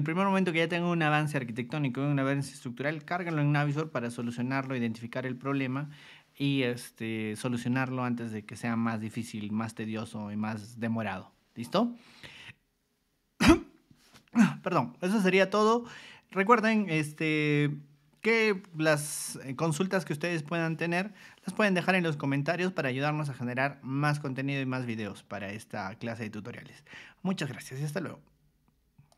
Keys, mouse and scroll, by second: 29.1 click.